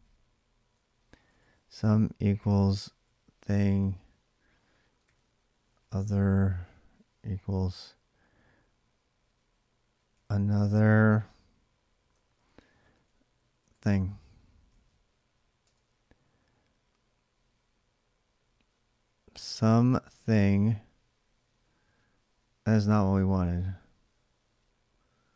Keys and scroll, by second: 0.3-7.0 typing, 9.7-10.9 typing, 12.1-15.9 typing.